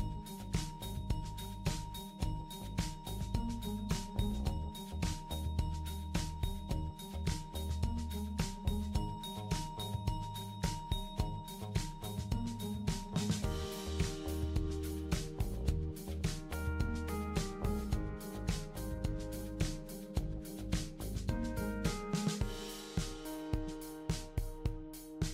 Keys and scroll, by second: 9.4 super+d, 9.7 super+d, 9.9 super+d, 15.0 BackSpace, 17.9 super+d.